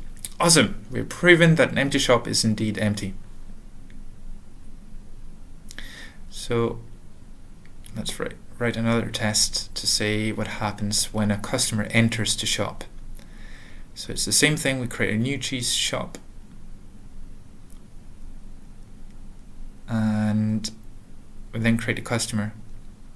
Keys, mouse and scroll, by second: 2.0 click, 6.0 ctrl+l, 6.3 ctrl+p, 6.3 ctrl+n, 6.3 Return, 6.3-8.4 typing, 8.4 Tab, 10.0-11.7 typing, 11.7 Tab, 12.8-17.9 typing, 18.6 Return, 19.0 ;, 19.4 Return.